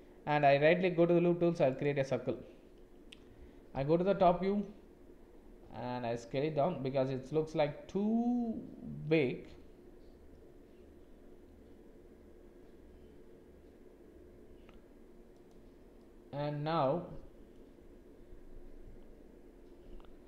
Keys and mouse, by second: 3.8 KP_7, 5.6 s, 16.0 click.